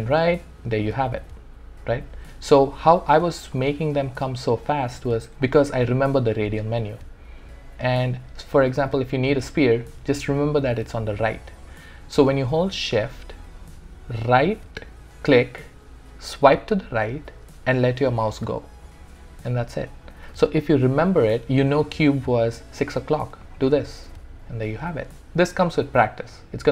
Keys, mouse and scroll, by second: 0.2-5.3 shift+right drag, 5.4-13.0 shift+right drag, 14.2-23.4 shift+right drag.